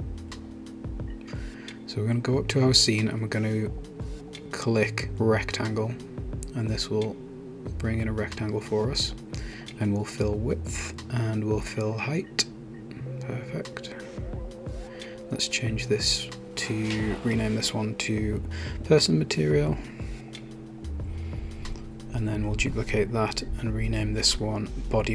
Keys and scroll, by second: 7.8 Return, 18.8-22.2 typing, 23.2 super+d, 24.4 Return.